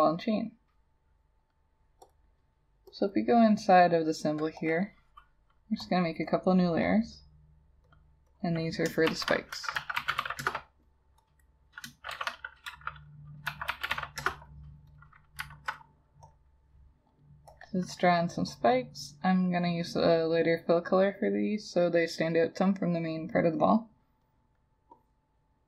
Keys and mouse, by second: 3.1 double click, 8.4 double click, 9.1-10.2 typing, 10.4 Return, 11.4 double click, 12.2-14.0 typing, 14.2 Return, 15.6 alt+click.